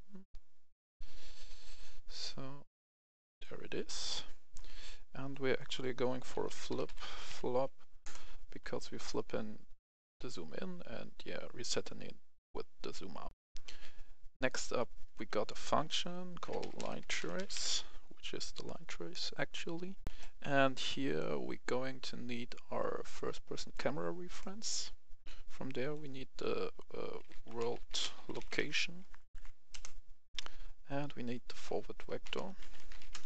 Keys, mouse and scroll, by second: 3.3 click, 3.9-4.6 scroll up 1, 4.6 right click, 5.3 click, 6.3-7.3 typing, 8.1 Return, 9.1 click, 13.3 F10, 14.5 click, 16.4-17.5 typing, 17.6 Return, 20.0 click, 20.0 F10, 21.6-23.0 scroll down 1, 23.0 click, 24.3 right click, 25.7 click, 27.2-28.5 typing, 29.2 Up, 29.4 Up, 29.7 Return, 31.3 click, 32.0-33.2 typing.